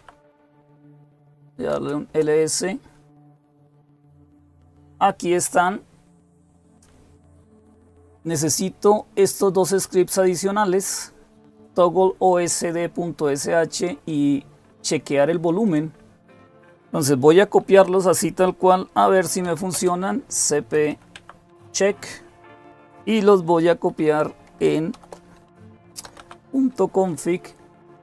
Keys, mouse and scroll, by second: 0.0-2.4 typing, 8.8-11.5 drag, 15.4-17.3 drag, 19.0-21.2 typing, 23.8-27.8 typing.